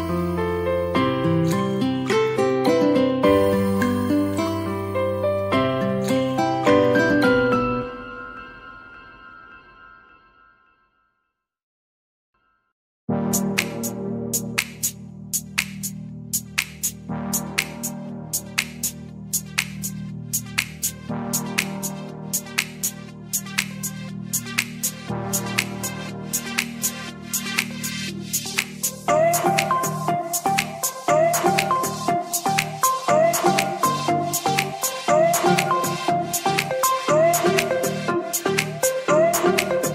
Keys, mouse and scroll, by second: 12.8 click, 23.6-24.0 middle drag, 24.1-26.5 scroll up 4, 24.6-27.5 middle drag, 28.1 click, 29.4 click, 31.1 click, 31.4 click, 32.4 click, 33.3 click, 33.5 click, 34.9-35.4 drag, 36.9 click, 37.2 click, 38.4 click, 39.1 click.